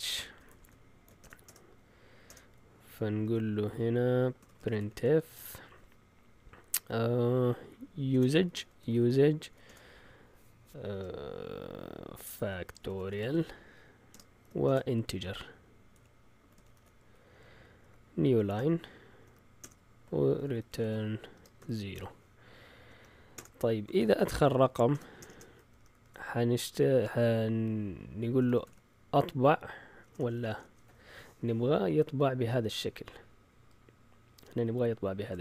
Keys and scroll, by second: 0.0-5.4 typing, 7.8-9.6 typing, 10.9-26.2 typing, 28.1-31.7 typing, 31.3 alt+Tab, 31.7 alt+Tab.